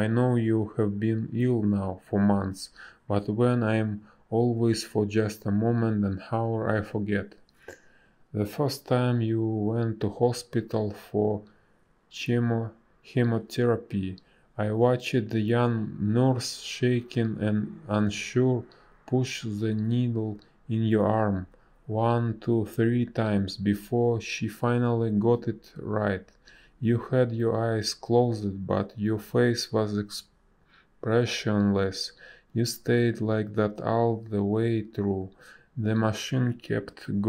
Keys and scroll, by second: 3.6 space, 8.2 space, 16.0 space, 18.8 space, 19.3 ctrl+z, 19.7 ctrl+z, 20.1 ctrl+z, 22.0 space, 27.0 space, 29.4 ctrl+z, 29.9 ctrl+z, 30.2 space, 34.0 a, 36.7 space.